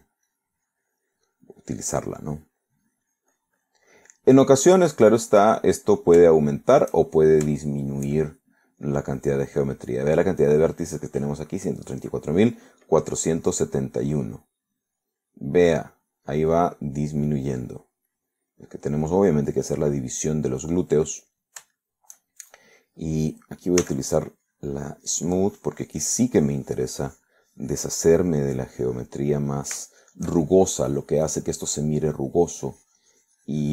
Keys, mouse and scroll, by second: 0.1 middle click, 0.9 click, 2.2 click, 3.2 middle click, 3.8-5.4 drag, 7.4 shift+middle click, 8.2 shift+middle click, 9.3 shift+middle click, 14.3 click, 15.8 click, 17.0 middle click, 17.8 click, 18.9 click, 19.8 click, 20.1 middle click, 22.7-24.0 shift+middle drag, 24.9 s, 25.4-30.3 drag, 30.3 middle click, 31.0 shift+middle click, 31.5-33.7 shift+drag.